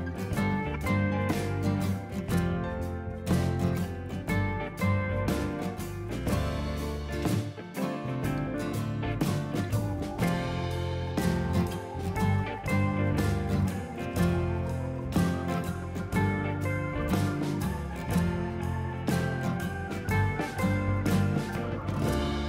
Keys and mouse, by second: 1.4 Right, 1.7 click, 3.7 click, 5.2 ctrl+1, 5.3 click, 5.5 a, 5.5 click, 6.0 ctrl+1, 6.0 ctrl+click, 6.2 right click, 6.4 click, 7.2 ctrl+q, 7.4-8.4 typing, 8.6 Return, 9.0 click, 10.8 ctrl+1, 10.9 click, 11.0 right click, 11.3 click, 11.7 s, 12.8 ctrl+shift+x, 13.0 click, 13.3 shift+click, 14.4 a, 14.5 click, 16.7 s, 17.1 ctrl+z, 17.3 ctrl+1, 17.6 ctrl+z, 17.8 click, 18.4 c, 18.7 click, 19.1 Escape, 19.2 click, 19.6 click, 19.7 right click, 20.0 ctrl+z, 20.1 click, 20.3 ctrl+z, 20.5 click, 21.8 c, 22.1 click.